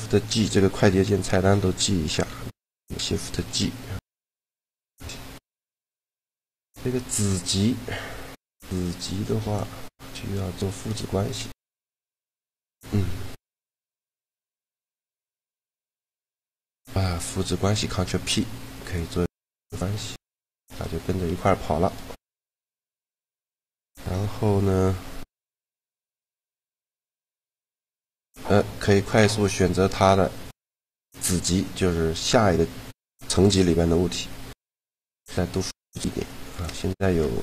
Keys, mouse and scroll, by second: 2.2 t, 3.5 shift+g, 4.7 shift+g, 13.6 shift+d, 14.8 right click, 15.7 click, 16.6 ctrl+p, 19.4-20.8 drag, 19.8 g, 21.2 g, 26.5 shift+g, 34.4 shift+d, 35.0 shift+d, 35.9 shift+d, 36.6-37.4 right drag, 37.0 g.